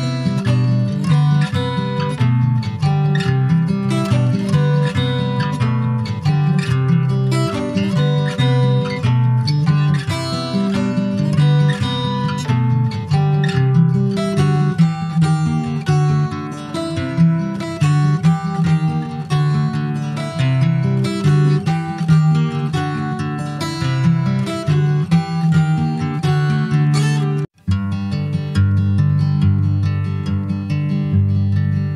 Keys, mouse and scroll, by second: 0.2 click, 0.7 g, 2.5 click, 3.1 g, 4.3 click, 4.9 g, 6.2 click, 6.8 g, 8.2-9.1 scroll down 5, 9.1 `, 10.5-11.1 scroll up 1, 11.1 click, 12.2 shift+middle click, 13.0 g, 15.3 click, 16.2 g, 17.7 click, 18.1 g, 20.3 click, 21.0 g, 22.0 click, 23.2 g, 25.4 click, 25.9 g, 28.2 `, 28.5 click, 28.7-29.5 scroll down 5, 29.5 middle click, 29.7 alt+z, 30.0 click, 30.3-30.6 scroll down 4, 30.6 middle click, 30.9 scroll up 1, 31.0 Tab, 31.9 ctrl+s.